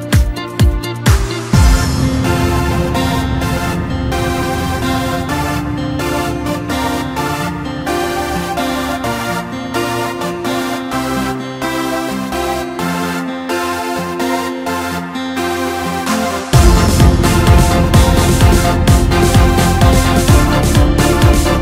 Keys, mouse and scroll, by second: 2.6 KP_Divide, 2.9 KP_7, 3.7 Tab, 4.8 2, 5.5 click, 5.7 click, 6.5 1, 7.7-10.4 drag, 10.4 s, 14.6-14.9 scroll up 1, 14.9-15.7 scroll down 1, 15.7 a, 16.0 3, 16.6 middle click, 17.5-18.2 scroll up 1, 18.2 e, 20.8 Tab.